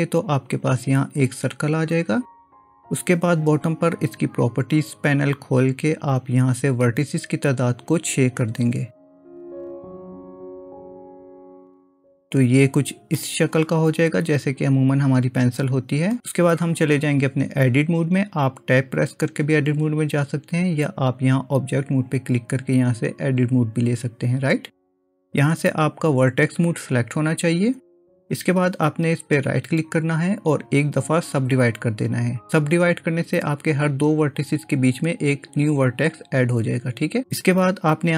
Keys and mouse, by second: 7.7-10.8 drag, 12.1 click, 13.2-16.2 middle drag, 22.0-23.6 drag, 29.6-31.5 right drag.